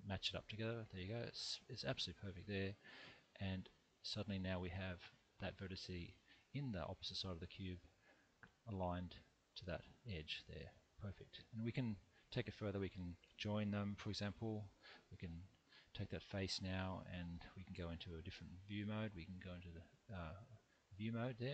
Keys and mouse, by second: 2.6-4.9 middle drag, 8.2 middle click, 9.5 middle click, 12.0 middle click, 14.0 j, 15.2 3, 16.1 middle click, 18.9-21.0 drag.